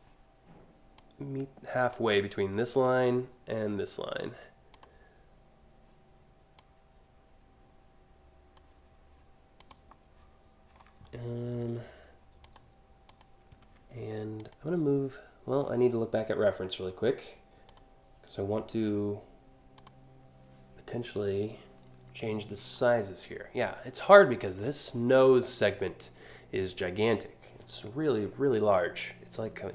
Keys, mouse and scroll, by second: 0.6 click, 4.3 click, 6.2-8.1 drag, 9.2 click, 12.1 click, 12.7 click, 14.0 click, 17.3 click, 19.4 click.